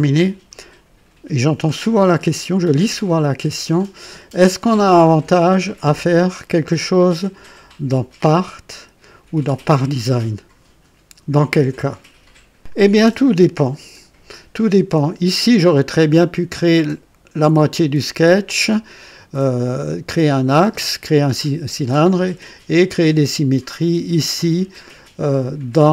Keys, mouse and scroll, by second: 1.7-4.3 drag, 4.9 right click, 14.5-16.4 drag.